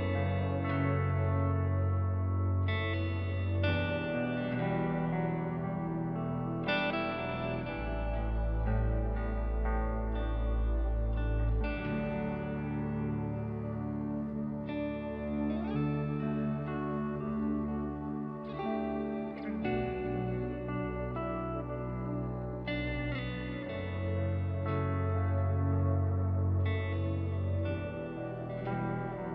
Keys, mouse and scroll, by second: 0.1 ctrl+s, 0.4 click, 0.8 ctrl+click, 0.9 click, 1.2 middle click, 1.9 middle click, 4.3 middle click, 4.5 middle click, 4.9 click, 5.3 click, 5.6 g, 7.5 click, 8.7 click, 9.1 ctrl+click, 9.9 click, 10.2 click, 10.6 click, 10.7 click, 10.9 click, 11.3 click, 13.6 click, 14.0-15.3 drag, 16.1-17.1 drag, 17.4 click, 17.5 alt+s, 17.7 click, 18.3 click, 18.7 click, 18.9 click, 19.4 click, 20.2 click, 20.4 s, 21.3 ctrl+z, 21.5 s, 22.1 s, 22.4 g, 22.9 g, 23.5 middle click, 23.7 middle click, 24.5 click, 26.6 click, 26.9 click, 27.1 shift+middle click, 28.4 middle click, 28.8 ctrl+middle click.